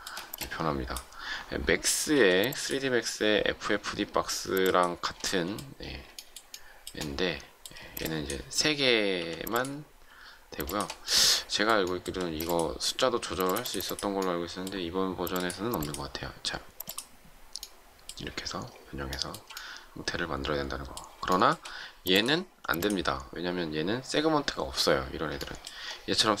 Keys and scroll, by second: 0.1 shift+space, 2.0 m, 7.7 shift+space, 9.1 m, 12.1 shift+space.